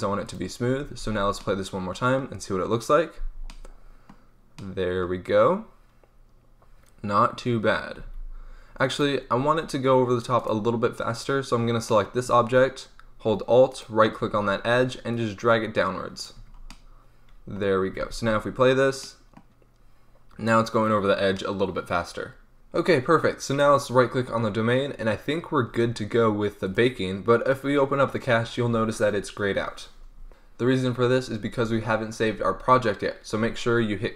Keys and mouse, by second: 0.8 alt+a, 8.0 alt+a, 9.3-11.2 drag, 12.2 Tab, 13.6-15.0 right drag, 15.0-16.2 drag, 16.3 Tab, 16.5-16.9 middle drag, 17.9 alt+a, 26.6-32.6 drag.